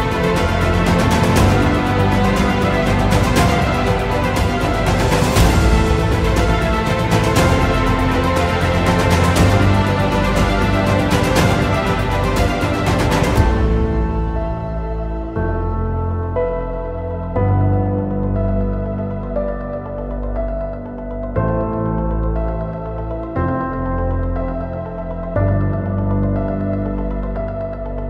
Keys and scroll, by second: 2.1 F3, 2.5 Escape, 9.3 Escape, 10.7 F2, 12.6 Escape, 15.8 shift+F2, 16.1 F3, 18.4 g, 24.9 space, 25.2 F4.